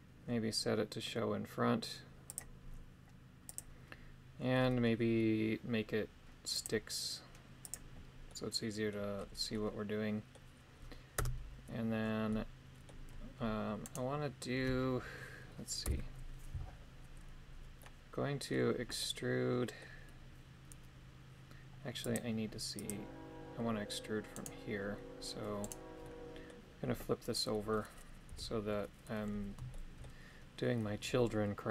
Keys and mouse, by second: 3.4 click, 6.6-7.7 drag, 8.2 middle click, 9.4 middle click, 11.3 Tab, 12.2 middle click, 14.0 right click, 16.0 KP_7, 17.7 middle click, 19.0 middle click, 22.0 click, 24.3 right click, 25.6 right click, 26.0 middle click, 27.5 middle click, 28.2 KP_3, 29.7 shift+middle click.